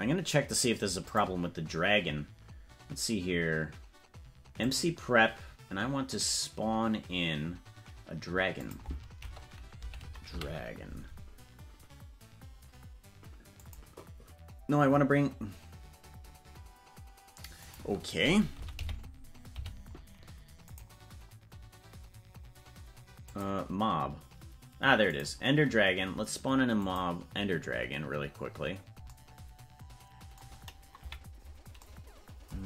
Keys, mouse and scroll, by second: 0.4 ctrl+s, 1.0 click, 4.6 click, 8.5-13.7 drag, 17.6-20.7 drag, 22.0 scroll down 1, 23.2 click, 23.2 scroll down 2, 26.8-28.3 drag, 31.0 KP_Decimal.